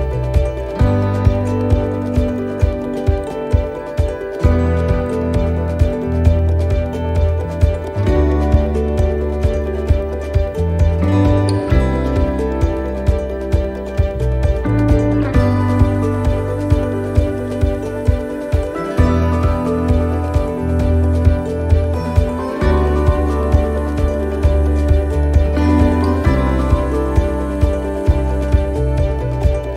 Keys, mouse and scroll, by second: 6.9 x, 8.0 middle click, 8.7-9.1 scroll up 3, 9.1 middle click, 9.7 right click, 10.1 right click, 10.6 c, 12.3 x, 13.4 middle click, 13.7 c, 16.0 click, 16.5 c, 18.6 x, 20.2 c, 21.5 x, 23.1 right click, 23.6 x, 24.9 right click, 25.4 x, 26.9 middle click, 27.4 scroll down 2, 28.6 ctrl+z, 28.8 ctrl+z, 29.0 ctrl+z, 29.2 ctrl+z, 29.4 ctrl+z, 29.6 ctrl+z.